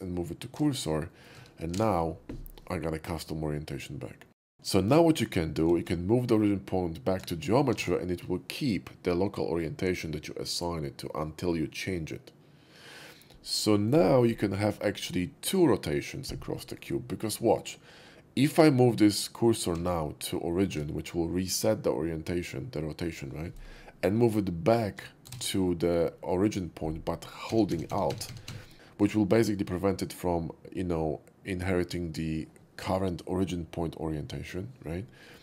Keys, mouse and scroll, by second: 0.0 shift+s, 1.0 middle click, 1.0 shift+s, 1.4 Tab, 1.8 alt+x, 4.5 ctrl+z, 5.8 shift+s, 6.5 shift+s, 7.8 alt+x, 8.2-13.6 middle drag, 13.9 right click, 16.5 middle drag, 19.8 shift+s, 20.3 shift+s, 21.7 shift+s, 25.0 shift+s, 26.2 shift+s.